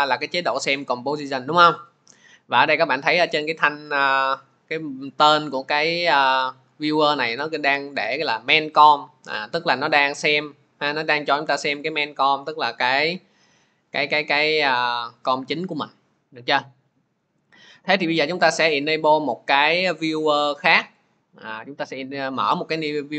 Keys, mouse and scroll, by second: 5.8 click, 10.9 click, 12.8-23.1 drag.